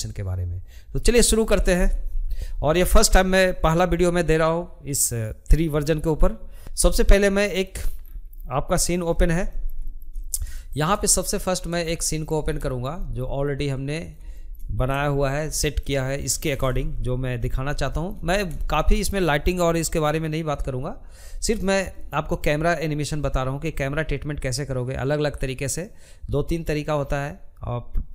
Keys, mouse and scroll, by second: 6.6 scroll down 3, 6.7 middle click, 7.4-7.9 scroll up 1, 7.9-9.3 shift+middle drag, 9.3 scroll down 1, 9.5 shift+middle click, 10.3-11.1 scroll down 3, 10.4 shift+middle click, 12.1 click, 12.7 shift+middle click, 13.6 Delete, 14.0 middle click, 14.5 click, 15.8-20.4 middle drag.